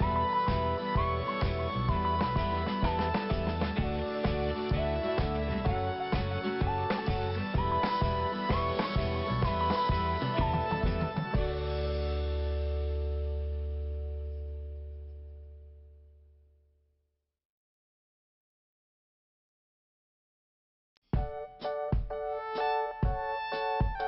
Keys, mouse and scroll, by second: 2.0 scroll down 1, 2.6 scroll up 1, 4.4-4.8 scroll down 1, 5.6 click, 7.6-8.1 scroll up 1, 8.1 click, 9.2 scroll up 1, 10.8 click, 11.9 click, 14.4 scroll down 1, 17.4 click, 17.4 scroll up 1, 18.6 scroll up 1, 19.1 click, 20.2 click, 21.5 scroll down 1, 22.5-22.8 scroll up 2, 23.1 click.